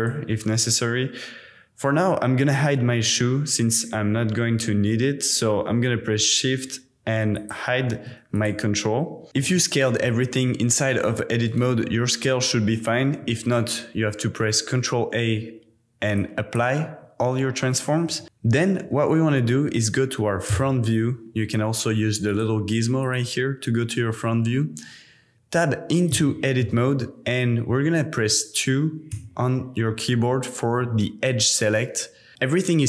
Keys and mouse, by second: 7.3 shift+click, 7.5-8.0 shift+middle drag, 9.4 Tab, 10.0 s, 11.5 click, 11.9 Tab, 13.5 super+a, 18.1 s, 18.2 click, 20.5 KP_1, 22.3 click, 23.1 click, 26.2-26.6 shift+middle drag, 26.6 shift+click, 26.9 Tab, 29.1 2, 32.3 a.